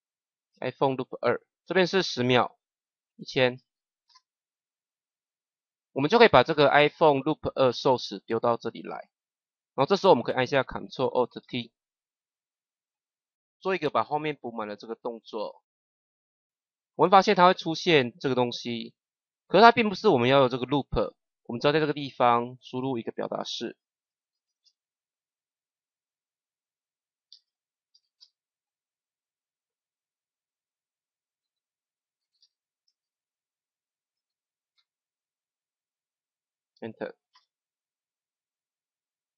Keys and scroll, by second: 0.4 2, 3.2 KP_1, 11.3 ctrl+alt+t, 24.0 l, 27.2 shift+o, 27.8 u, 28.1 t, 30.4-34.5 typing, 36.4 Return, 37.2 KP_0.